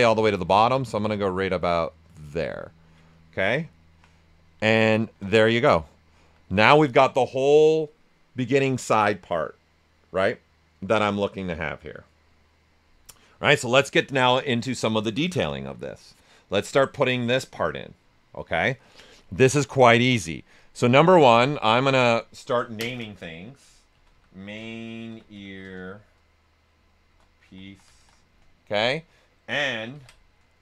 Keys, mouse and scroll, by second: 4.1 right click, 5.0 shift+f, 5.3 right click, 6.1 alt+right click, 19.3 right click, 20.5 click, 23.6-28.5 typing, 29.9 ctrl+f.